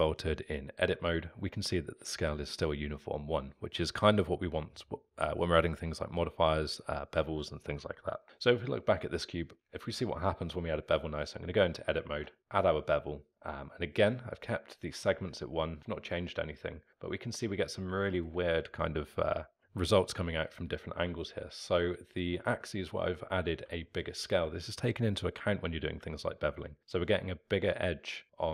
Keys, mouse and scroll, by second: 8.2 click, 9.6 Tab, 12.1 ctrl+b, 15.7-28.5 alt+middle drag.